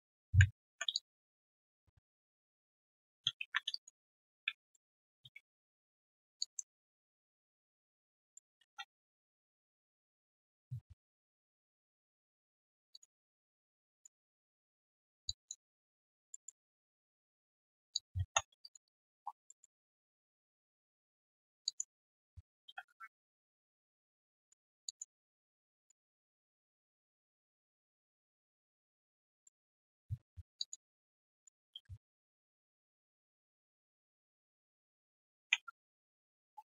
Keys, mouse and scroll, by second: 0.9 alt+click, 1.5 alt+right click, 2.5-5.4 typing, 3.7 alt+right click, 4.1 alt+middle click, 4.7 middle click, 6.7 alt+middle click, 7.1 alt+right click, 7.4 alt+click, 8.2 alt+middle click, 8.5-9.2 typing, 9.0 right click, 11.0 ctrl+shift+right click, 14.2-15.1 typing, 15.6 alt+middle click, 16.0 alt+click, 16.3 alt+middle click, 16.6 alt+click, 16.8 alt+q, 17.2 right click, 17.9 alt+click, 18.2 typing, 18.6 alt+right click, 18.8 alt+click, 19.1 alt+1, 19.1 click, 19.4 alt+middle click, 20.4 alt+right click, 20.8 right click, 20.8 q, 21.6 alt+click, 22.0 alt+middle click, 23.1 ctrl+shift+q, 24.8 alt+click, 25.2 alt+middle click, 25.6 alt+click, 26.0 alt+middle click, 29.4 alt+middle click, 30.3 alt+scroll down 1, 30.9 alt+middle click, 31.1 alt+click, 32.9 alt+q, 32.9 click, 33.2 right click, 35.2 right click, 35.4 ctrl+Delete.